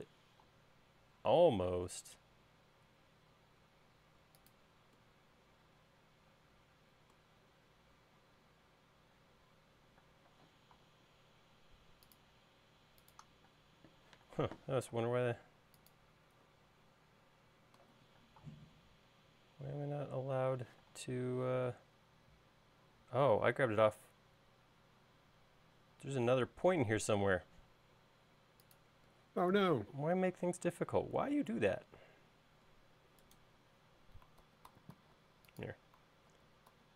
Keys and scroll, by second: 10.1 space, 13.6 space, 14.3 m, 18.4 space, 21.0 m, 34.5 super+z, 36.4 super+z.